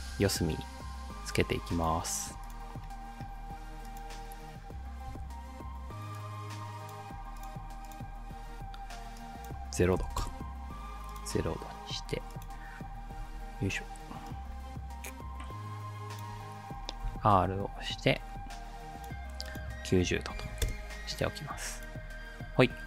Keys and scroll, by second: 5.1 r, 10.0 0, 10.2 Return, 13.2 ctrl+d, 17.1 r, 20.1-20.9 typing.